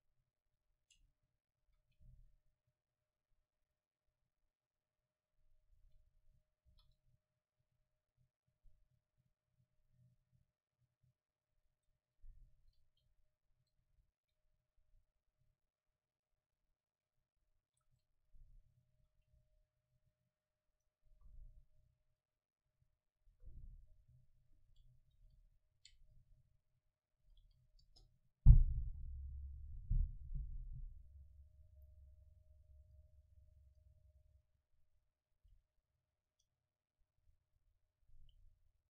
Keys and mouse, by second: 1.7 Tab, 1.7 a, 2.8 c, 5.8-7.7 drag, 6.7 Right, 9.7-12.0 drag, 12.0 Tab, 12.4 middle click, 12.9 KP_0, 15.0-16.9 middle drag, 17.9 Tab, 19.0 a, 19.4 c, 20.9-22.6 drag, 21.1 KP_0, 22.6-23.7 middle drag, 24.2-29.2 drag, 25.2 w, 25.4 a, 32.6-37.8 drag, 37.9 Tab.